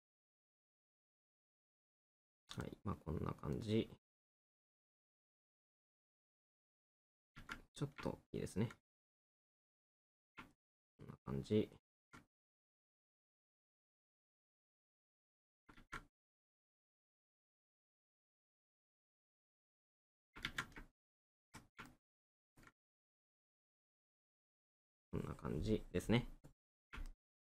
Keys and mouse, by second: 0.0 middle click, 2.6 middle click, 8.1 middle click, 10.6 middle click, 12.5 right click, 16.1 right click, 21.0 middle click, 27.1 middle click.